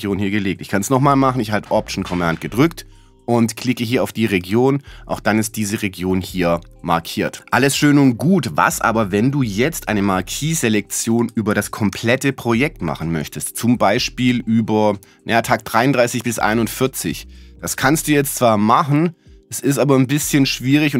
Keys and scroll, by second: 11.4 z.